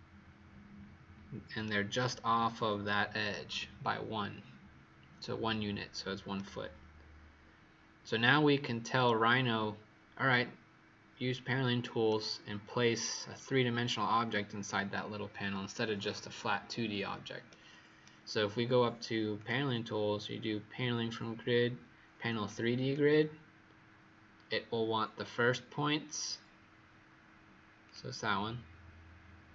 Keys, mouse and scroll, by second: 1.9 click, 6.3 right click, 19.3 click.